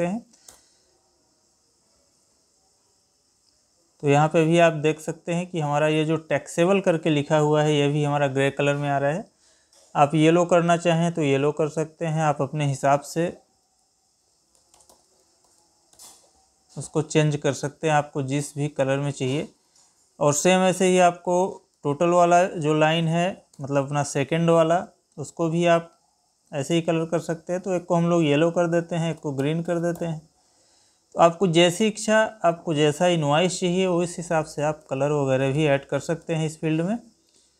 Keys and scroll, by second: 21.7 ctrl+c, 24.1 ctrl+v, 34.7 Escape.